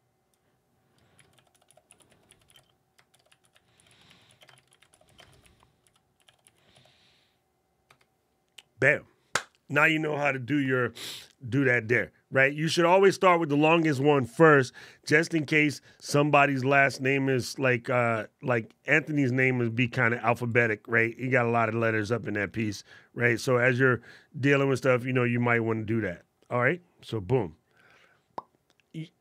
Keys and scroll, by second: 0.9 shift+c, 2.9 shift+m, 4.3 shift+e, 5.0 shift+n.